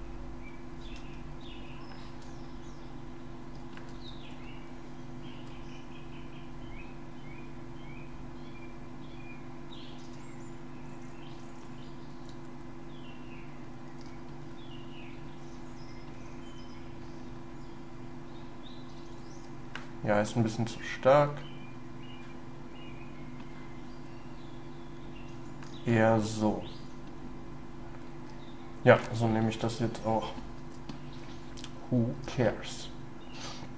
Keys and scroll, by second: 0.9 ctrl+y.